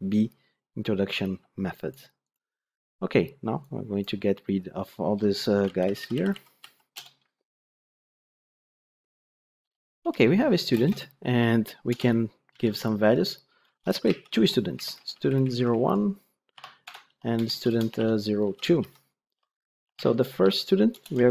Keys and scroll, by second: 5.6 ctrl+shift+Left, 14.3 ctrl+d.